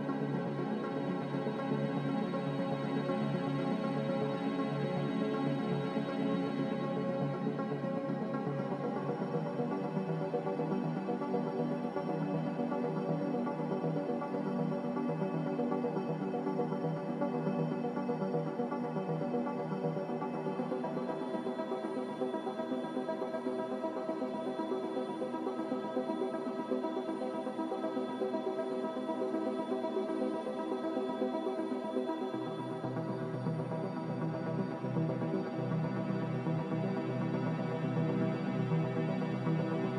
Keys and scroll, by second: 24.1 Delete, 25.3 c, 33.4 z.